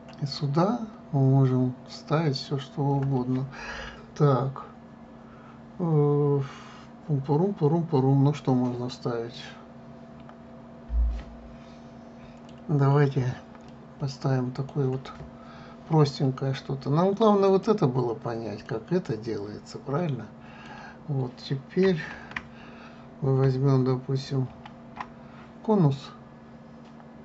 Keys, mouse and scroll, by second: 10.0-13.1 middle drag, 14.3-17.4 middle drag, 18.1 click, 19.3-22.4 middle drag, 22.8 shift+a, 25.2 shift+a.